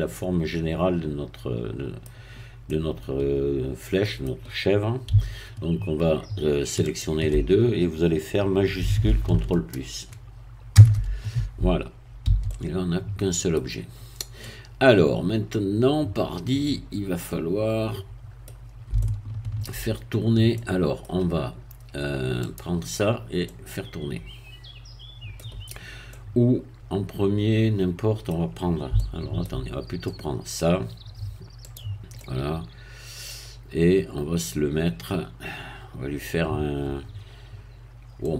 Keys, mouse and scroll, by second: 2.4 scroll up 1, 2.6-5.1 middle drag, 6.8 shift+click, 10.7 ctrl+shift+KP_Add, 12.3 a, 12.4-14.0 middle drag, 14.0-14.4 scroll up 1, 14.4-18.9 middle drag, 19.0 shift+middle click, 20.1-20.6 shift+scroll up 1, 20.6 middle click, 22.4 click, 23.0 scroll down 1, 23.4-28.9 middle drag, 29.0 shift+middle click, 29.8 shift+scroll up 1, 30.0-31.6 middle drag, 31.6 click, 32.2-36.4 middle drag, 38.2-38.3 middle drag.